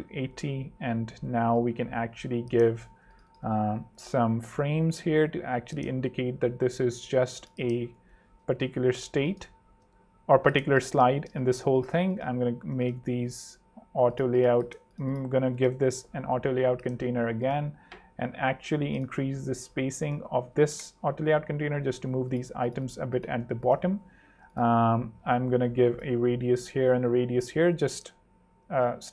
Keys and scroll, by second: 1.2 r, 3.0 z, 7.5 f, 7.9 Tab, 8.6 Down, 9.2 Escape, 10.0 Down, 10.5 alt+z, 11.3 alt+space, 11.9 shift+space, 15.7 shift+a, 18.3 super+z, 19.1 ↺, 20.6 3, 20.7 Home, 22.5 super+z, 24.4 z, 27.7 alt+super+3, 28.6 super+3, 28.7 super+2.